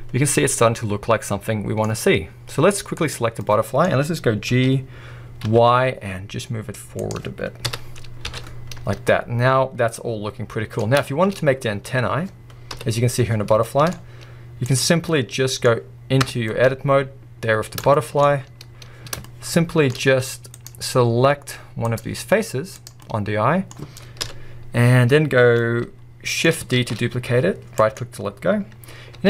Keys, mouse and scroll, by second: 2.4 scroll up 1, 3.1 drag, 3.4-8.4 middle drag, 4.6 g, 8.5-9.1 scroll down 1, 9.1-11.4 middle drag, 11.4-12.7 scroll up 1, 12.7 KP_1, 13.3 scroll down 1, 13.6 shift+middle drag, 13.9-14.8 scroll up 1, 14.8-15.1 drag, 15.1-16.3 middle drag, 16.3 Tab, 16.5-18.2 middle drag, 18.2-19.3 scroll up 1, 19.3-20.5 shift+middle drag, 20.5 click, 21.9 click, 23.0 middle click, 24.2 KP_1, 25.5 scroll down 1, 25.6 middle click, 26.8 shift+d, 29.2 e.